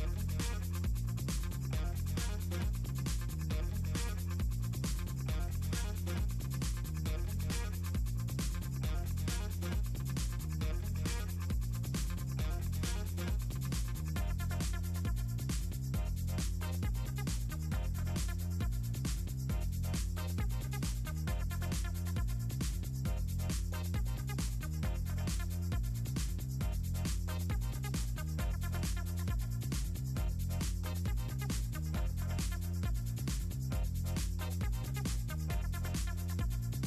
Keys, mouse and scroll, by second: 1.1 click, 9.4 click, 10.2 click, 11.7 click, 15.5-16.5 drag, 17.6 click, 20.3-20.7 middle drag, 21.5-21.8 ctrl+scroll down 2, 23.2 middle click, 25.2 click, 28.3 click, 30.5 click, 31.0 click, 31.5 middle click, 34.8 scroll up 2, 34.9-35.5 scroll down 1, 36.5 click.